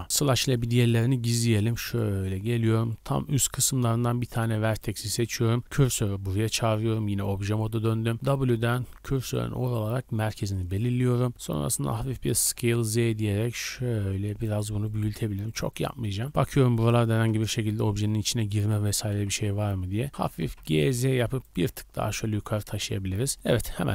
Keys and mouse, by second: 0.2 KP_Divide, 0.2-1.6 drag, 0.6 Tab, 1.6 shift+middle click, 1.9-9.7 drag, 5.4 shift+s, 6.3 Tab, 7.6 w, 12.2 s, 13.2-15.3 drag, 15.3-16.4 shift+middle drag, 16.4-19.5 drag, 17.1 s, 19.0 s, 20.1 g, 22.1 middle click, 22.6 KP_0, 22.8-23.9 drag, 23.1 a, 23.3 a.